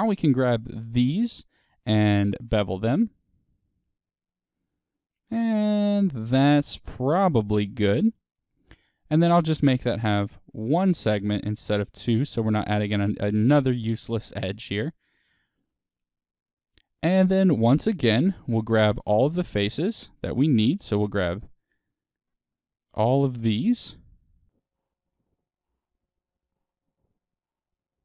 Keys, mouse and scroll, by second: 0.7 alt+shift+click, 1.0-10.6 middle drag, 2.3 ctrl+b, 6.2 click, 7.4 scroll down 1, 7.6 scroll, 10.6 click, 11.3-14.1 middle drag, 12.5-12.9 scroll, 14.3-18.4 middle drag, 18.4 3, 18.8 click, 21.1 ctrl+click, 23.3-24.5 middle drag, 24.5 ctrl+click, 24.6 middle click, 25.0 shift+click, 25.1 middle click, 25.5 ctrl+click, 25.8 middle click, 26.2 ctrl+click, 26.4 middle click, 26.8 shift+click, 26.9 middle click, 27.6 ctrl+click, 27.9 middle click.